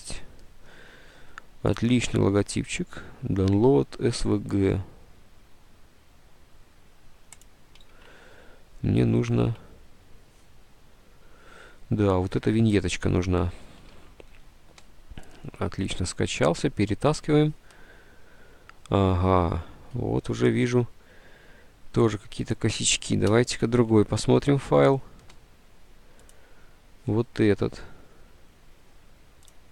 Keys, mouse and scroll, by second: 7.9 alt+Tab, 9.5 alt+Tab, 13.0 alt+Tab, 14.1 alt+Tab, 23.4 Delete, 24.0 alt+Tab.